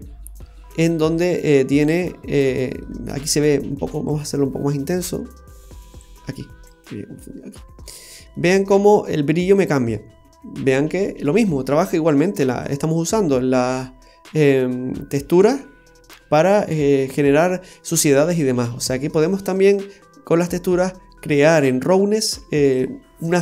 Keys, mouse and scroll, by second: 4.1 click, 5.9 click, 8.3 middle click, 12.6 click, 17.4-18.0 scroll down 2, 17.7 middle click.